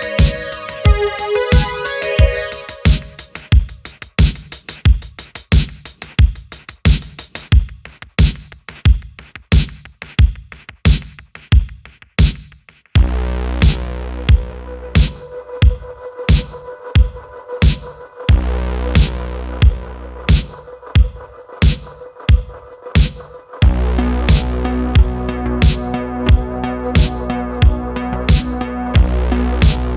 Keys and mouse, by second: 0.3-2.8 drag, 7.8 middle click, 8.4-8.8 middle drag, 9.1 middle click, 10.9-12.4 middle drag, 12.9-13.3 shift+middle drag, 13.4 middle click, 13.9-14.9 middle drag, 15.2 middle click, 16.2-17.4 middle drag, 18.3 middle click, 18.8 middle click, 19.4 click, 19.7 middle click, 22.1-23.5 drag, 24.4-25.2 drag, 25.6-28.3 drag, 28.9 click.